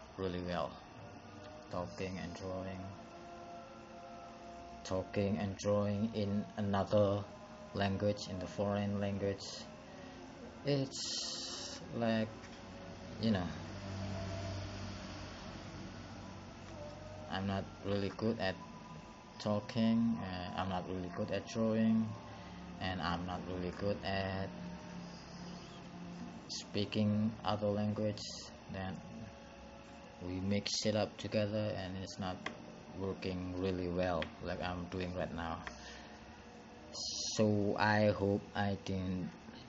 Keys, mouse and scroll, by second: 15.3 click, 18.0 click, 34.4 click.